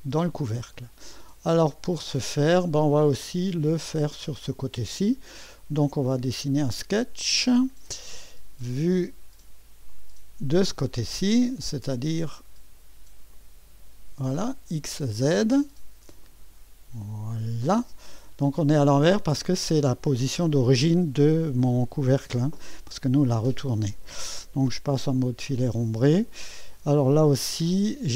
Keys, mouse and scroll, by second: 0.7-4.0 drag, 2.9 typing, 5.5 scroll down 1, 6.1 click, 9.9 click, 13.3 click, 16.2 click, 16.6 click, 18.1-18.6 scroll up 1, 18.6 right click, 25.0 2.